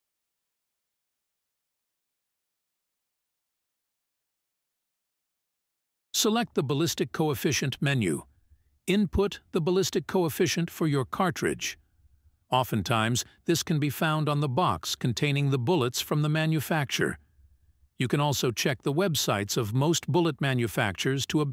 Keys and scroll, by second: 4.6 Menu, 8.8 Menu.